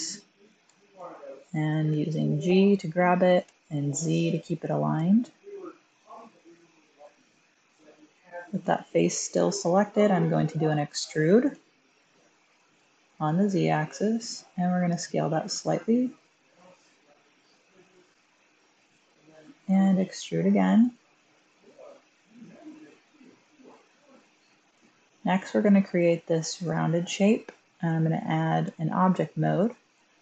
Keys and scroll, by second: 0.5 1, 1.8 g, 3.3 typing, 8.5 typing, 11.4 typing, 12.7 typing, 15.9 typing, 19.6-20.6 typing, 22.5 typing, 28.5 Tab.